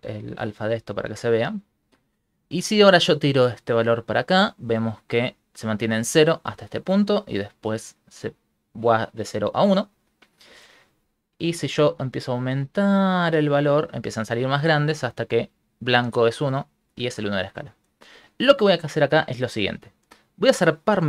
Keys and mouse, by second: 3.2 click, 10.6 click, 11.8 click, 19.2 click.